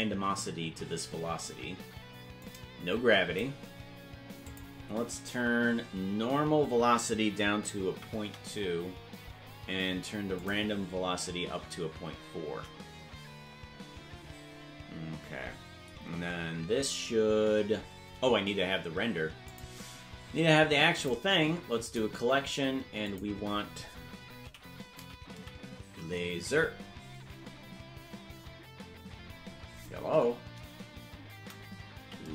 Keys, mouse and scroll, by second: 2.4-3.4 drag, 4.4-8.3 drag, 10.3-12.9 drag, 19.4 click, 20.0 scroll down 3, 20.9-22.0 drag, 23.0-32.3 drag, 32.1 a.